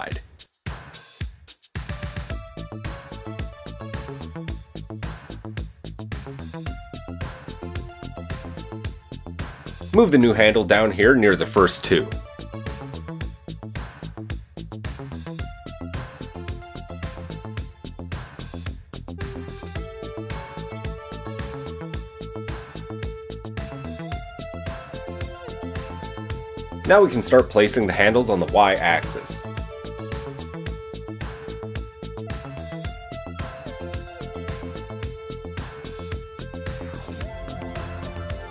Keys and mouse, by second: 2.3 KP_1, 3.6 click, 3.8-7.0 middle drag, 5.9 KP_1, 7.0 click, 7.0-15.2 shift+middle drag, 10.2 g, 12.9 typing, 15.2 click, 15.3 shift+middle click, 20.1 g, 23.2-27.5 shift+middle drag, 27.5 shift+click, 27.6-34.8 shift+middle drag, 30.8 g, 34.8 click, 34.9-38.5 shift+middle drag, 36.6 g.